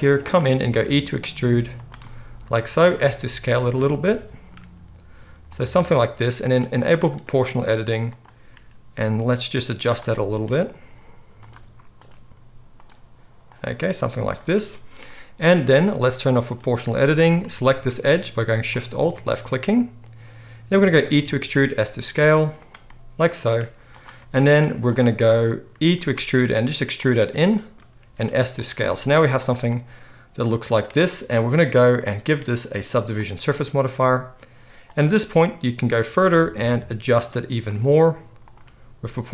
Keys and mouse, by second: 0.7 e, 2.6-7.1 right drag, 2.9 s, 4.6 g, 7.1 middle click, 7.2 right click, 8.0 middle click, 8.2-9.8 right drag, 8.5 g, 9.8 middle click, 9.9 right click, 10.6-14.1 drag, 10.6 g, 12.2 g, 13.7 g, 14.1-16.4 right drag, 16.4 middle click, 16.5-20.1 right drag, 17.1 alt+a, 18.7 alt+shift+click, 18.7 alt+shift+middle click, 20.1-23.4 middle drag, 21.1 e, 23.4-27.7 right drag, 23.6 z, 24.6 z, 26.1 e, 27.7-31.1 drag, 28.1 s, 29.1 z, 31.1 right click, 31.9-34.9 middle drag, 34.9 right click, 35.8 middle click, 36.0-38.4 right drag, 36.6 g, 38.4 middle click, 38.5-39.3 right drag, 38.6 g.